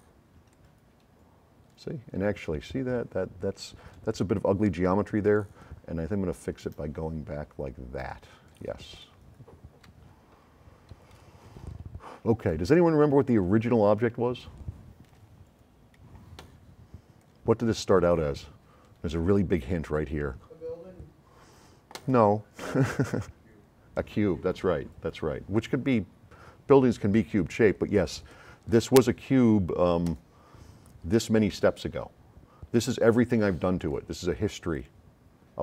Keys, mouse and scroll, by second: 0.5 click, 3.8-4.1 scroll up 1, 5.3 click, 8.3 click, 8.6 s, 8.9-10.0 right drag, 10.2 scroll up 2, 10.6 middle click, 11.0 s, 11.1-15.2 right drag, 17.2-17.8 drag, 28.3-28.8 drag, 30.0 click, 33.8 click, 34.7 click.